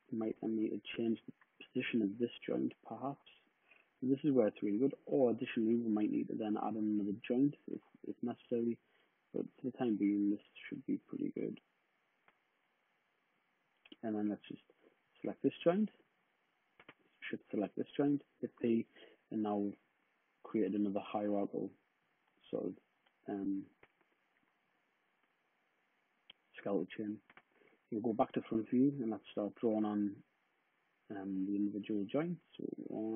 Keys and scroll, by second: 0.5 d, 1.1 space, 1.7 space, 15.3 w, 18.3 p, 18.9 space, 19.4 space, 27.2 space.